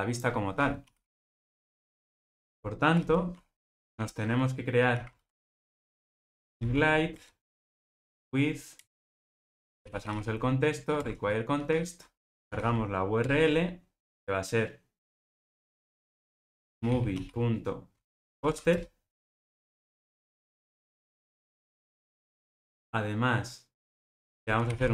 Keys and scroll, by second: 2.3 Return, 7.1 Return, 13.2 Return, 18.7 Return.